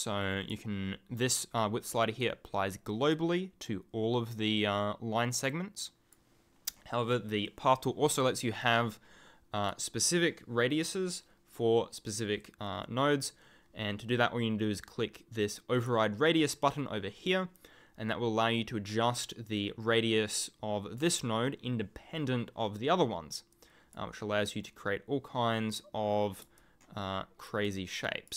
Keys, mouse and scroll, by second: 2.2 click, 8.6 click, 15.7 click, 18.1 click, 23.5 click, 26.5 ctrl+click.